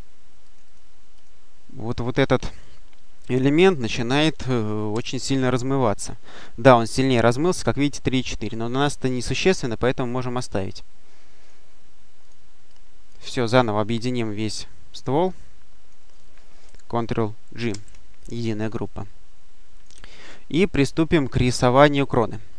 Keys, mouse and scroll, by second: 0.3 click, 4.7 ctrl+shift+f, 7.7-8.6 scroll up 1, 10.3 click, 11.3 click, 12.1 click, 14.0 click, 17.5 ctrl+g, 19.6 click, 20.0-21.2 scroll up 2, 21.2 scroll up 1.